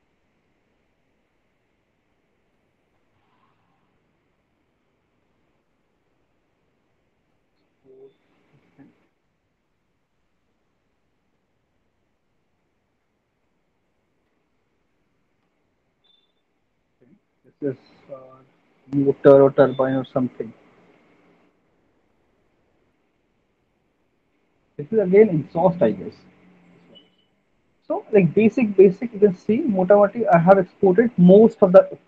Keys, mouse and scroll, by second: 3.6 click, 4.9 click, 7.2 click, 11.2 click, 13.0 click, 13.7 click, 14.2 BackSpace, 14.5-15.7 BackSpace, 16.2 BackSpace, 20.6-21.2 typing, 23.1-23.8 typing, 23.5 click, 25.3 click, 28.5 middle click, 28.8-29.3 scroll, 29.6 scroll, 30.2-30.7 scroll.